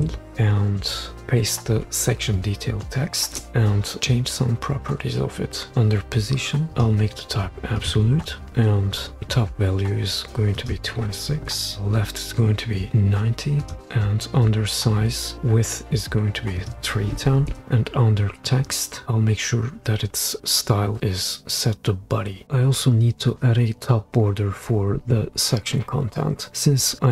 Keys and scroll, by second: 0.0 BackSpace, 1.2 t, 3.2 super+v, 11.5 2, 17.5 3.